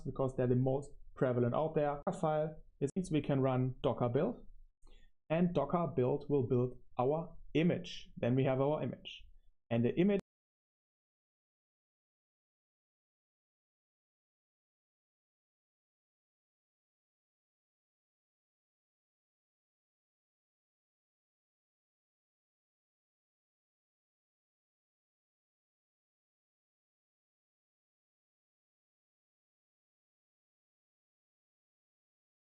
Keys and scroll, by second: 1.9 Tab, 2.8 Tab, 10.7 super+3, 11.0 super+3, 15.2 super+1, 15.6 super+3, 16.1-19.9 typing, 21.4-32.4 typing.